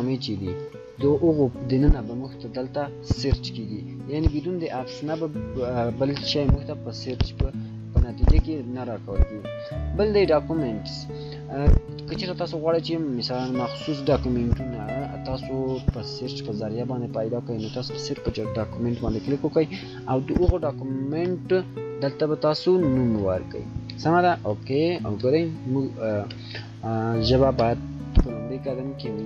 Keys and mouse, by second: 10.4 click, 21.9-23.7 typing.